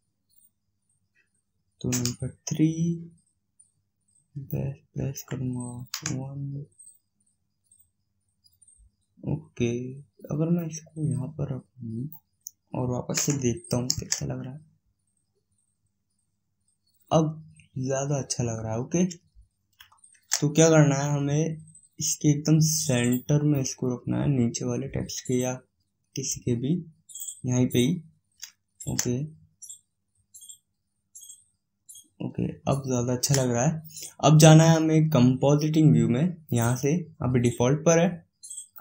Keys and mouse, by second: 1.8 KP_3, 5.2 middle click, 5.8 KP_1, 10.5-12.8 drag, 13.0 KP_0, 13.8 shift+z, 23.4-25.2 drag, 27.7 middle click, 28.7 shift+z, 30.6-33.3 middle drag, 36.3-38.2 drag.